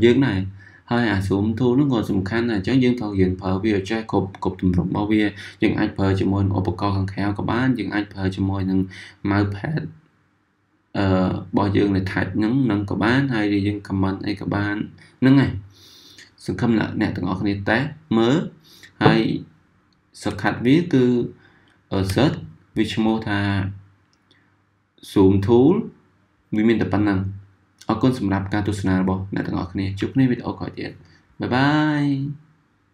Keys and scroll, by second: 20.3 z.